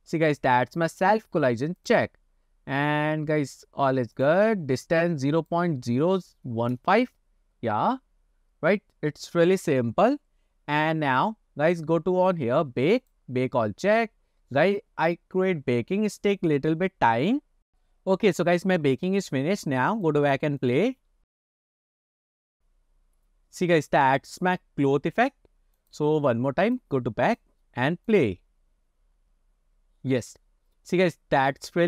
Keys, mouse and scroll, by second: 2.2 click, 4.2-7.3 drag, 11.5-13.1 scroll up 2, 13.1-18.6 drag, 20.0-20.4 drag, 21.2 click, 23.5 scroll up 1, 26.0 click, 26.7 click, 27.4-27.7 drag, 28.1 click.